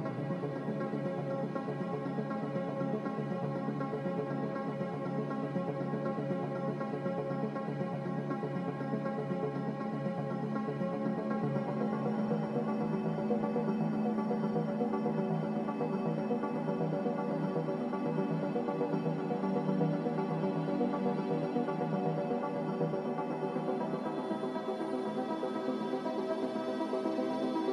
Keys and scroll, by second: 11.8 a.